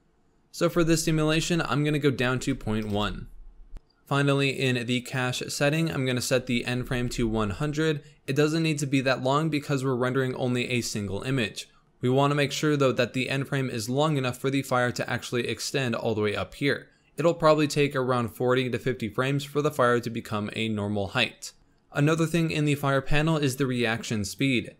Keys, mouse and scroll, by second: 0.6-3.7 drag, 3.7 scroll down 5, 5.7-7.0 drag, 7.0 0, 12.5 scroll up 1, 21.6-24.2 scroll up 3, 24.2 click.